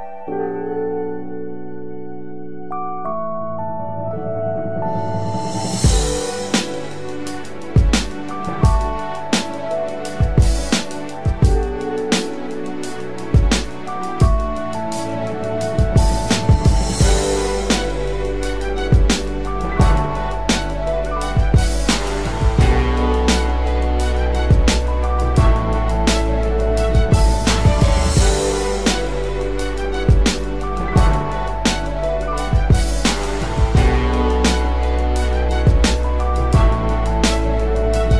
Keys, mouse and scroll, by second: 27.8-28.2 alt+scroll up 1, 29.2-29.8 alt+scroll down 1.